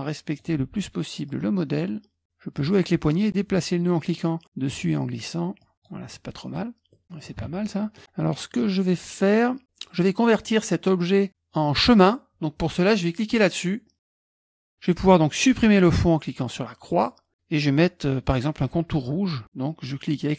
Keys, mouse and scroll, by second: 1.3-6.9 drag, 6.9 middle click, 7.1 click, 7.4 KP_Subtract, 7.4 middle click, 7.8 click, 8.0 middle click, 8.3-11.2 drag, 16.9 middle click.